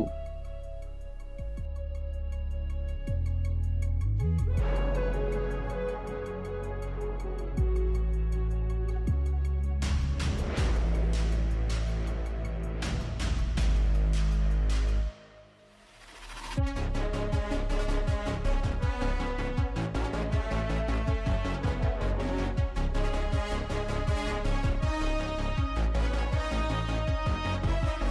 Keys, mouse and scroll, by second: 18.5 scroll down 4, 18.6 KP_7, 19.8 u, 19.9 r, 21.2 g, 23.2 click, 24.4 click, 25.1 g.